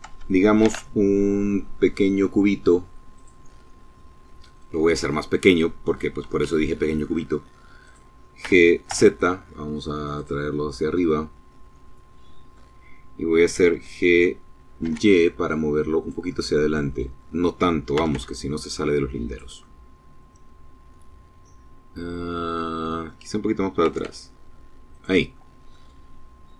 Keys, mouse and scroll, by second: 1.9 click, 3.1-4.7 middle drag, 4.9 s, 6.6 click, 7.1 g, 7.6 z, 8.9 click, 9.2 middle click, 10.1-11.4 drag, 12.4 g, 13.5 y, 14.7-16.0 drag, 16.7 g, 16.8 y, 18.0 click, 18.3-22.0 drag, 22.5 g, 22.8 y, 23.6 click, 24.0 middle click, 25.5 click, 26.4 click.